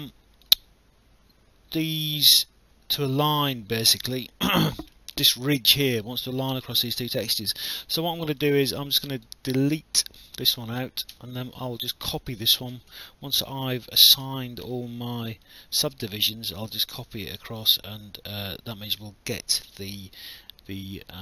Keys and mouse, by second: 0.1 alt+click, 4.2 alt+click, 5.2 alt+middle click, 6.9 alt+click, 8.0 alt+middle click, 8.4 alt+click, 9.3 right click, 10.5 click, 11.1 Delete, 11.1 KP_Decimal, 11.8 click, 12.7 ctrl+d, 14.2 w, 15.5 click.